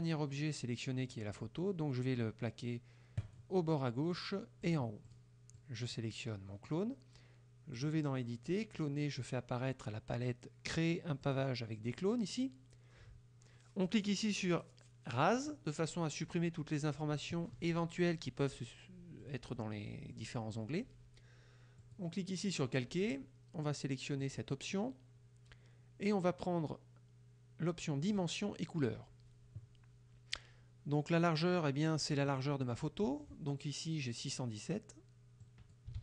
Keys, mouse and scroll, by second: 3.3 click, 4.7 click, 5.1 click, 5.6-6.1 drag, 7.9 click, 11.3 click, 15.4 click, 19.3 click, 20.2 click, 21.9 click, 24.3 click, 32.4 click, 35.5 click.